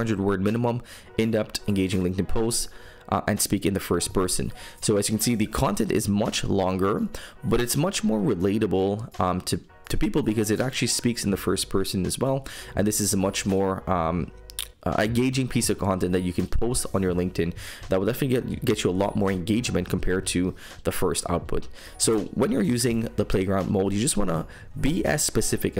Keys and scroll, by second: 4.0 super+m, 20.9 super+m.